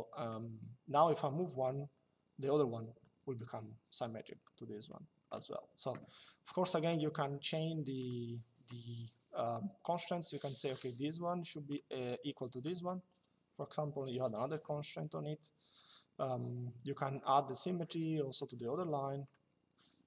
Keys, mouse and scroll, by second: 0.0 click, 5.0 click, 6.5 click, 7.7 click, 10.4 click, 16.9 click, 18.1 click.